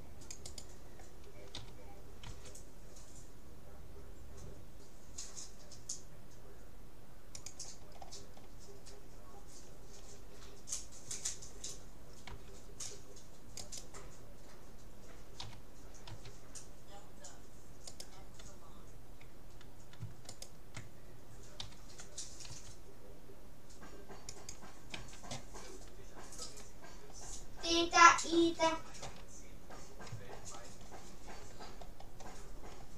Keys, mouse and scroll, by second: 1.7 g, 8.1 middle click, 9.3-10.3 middle drag, 11.1 a, 11.5 middle click, 12.3 c, 15.5 g, 20.3-22.1 right drag, 21.6 g, 25.1 a, 27.1-29.0 middle drag, 29.0 a, 29.7-32.9 middle drag.